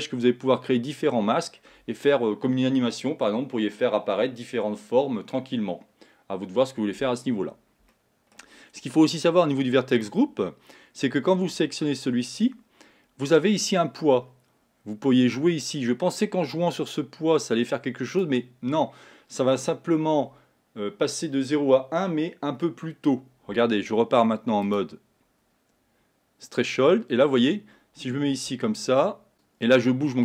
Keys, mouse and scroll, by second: 8.1 middle click, 8.5-10.0 scroll up 1, 10.0 click, 12.1 Tab, 15.9-18.9 drag, 24.8 click, 29.5-30.2 drag.